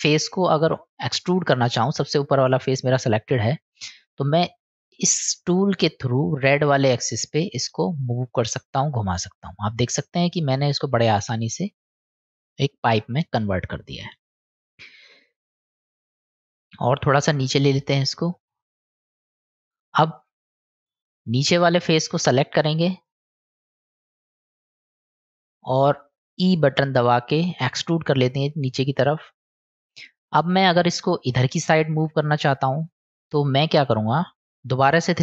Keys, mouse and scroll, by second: 4.2-9.1 drag, 10.4-11.0 middle drag, 15.7-16.2 middle drag, 17.3-18.7 drag, 19.5 click, 21.5-22.2 middle drag, 22.8-23.3 middle drag, 24.4 click, 26.0 middle click, 30.0-30.6 middle drag, 32.5-33.5 middle drag, 34.4 middle click.